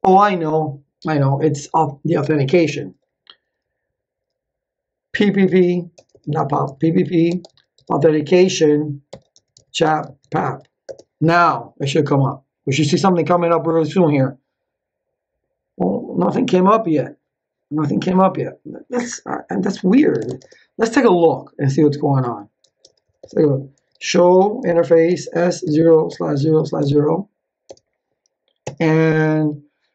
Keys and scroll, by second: 4.9-7.5 typing, 7.7 Tab, 8.8-10.9 typing, 19.7-20.6 typing, 22.6 ctrl+z, 22.8 Return, 23.5-27.6 typing, 28.6 Return.